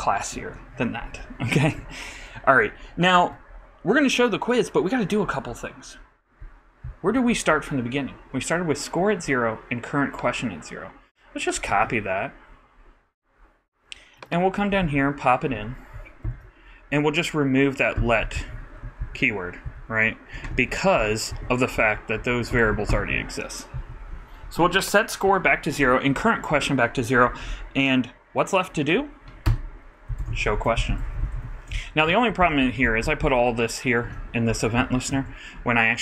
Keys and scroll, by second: 11.7 super+c, 14.8 super+v, 16.2 super+], 17.9 super+], 18.3 super+Left, 19.4 alt+shift+Right, 20.5 alt+shift+Delete, 30.2-32.2 typing, 32.3 shift+super+;, 32.4 shift+super+Left, 32.6 shift+super+Up, 33.8 shift+super+Up, 34.0 shift+super+x, 34.7 super+x, 34.8 super+Tab.